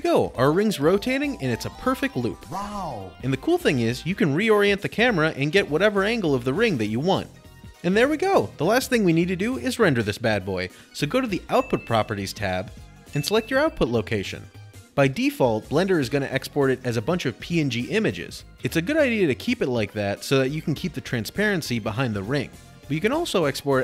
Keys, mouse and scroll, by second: 5.0 middle click, 8.1 0, 11.6 typing, 12.6-16.0 drag, 22.0 click.